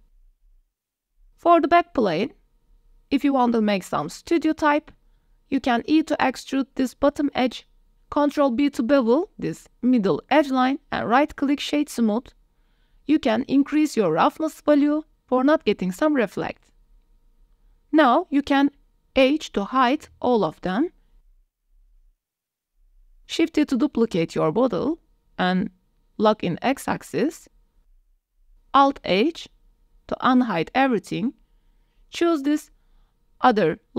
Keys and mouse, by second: 0.0 ctrl+z, 0.2 click, 0.5 ctrl+s, 0.7 drag, 1.5 click, 1.6 middle click, 1.8 middle click, 2.3 Tab, 2.7 shift+click, 3.7 2, 4.1 middle click, 4.7 g, 4.9 z, 5.9 click, 6.4 e, 6.7 y, 8.7 click, 9.6 ctrl+b, 12.1 Tab, 12.4 click, 13.0 click, 14.3-14.8 middle drag, 16.7-17.9 drag, 18.1 click, 18.2 middle click, 18.7 KP_0, 18.7 e, 18.7 d, 19.4 middle click, 19.6 d, 20.8 h, 21.4 drag, 21.7 h, 22.0 h, 22.3 click, 22.7 h, 23.3 click, 24.3 shift+d, 25.3 x, 27.3 g, 27.6 y, 28.1 click, 29.5 alt+h, 30.5 a, 30.7 a, 31.9 click, 32.4 click.